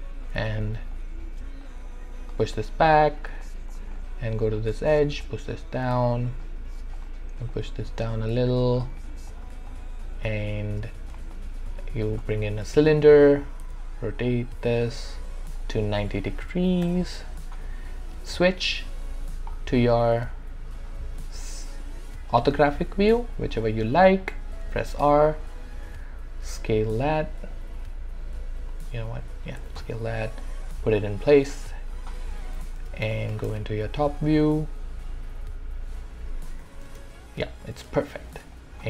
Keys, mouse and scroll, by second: 0.4 w, 0.9-3.4 drag, 3.4 alt+click, 3.9 right click, 4.4 click, 5.5-6.7 drag, 7.8 click, 9.0 right click, 9.3 click, 9.7-11.2 alt+drag, 11.2-12.8 shift+right drag, 12.8 alt+click, 13.6 e, 14.3 click, 16.3 typing, 16.8 Return, 17.6 w, 18.2 space, 19.5-20.8 scroll down 1, 23.6 space, 24.6 r, 25.1-29.6 drag, 29.6 w, 30.4-32.4 drag, 32.4 w, 32.9 space, 34.1-34.6 scroll down 1, 34.6 4, 36.5 5, 36.9 space, 38.5 alt+click.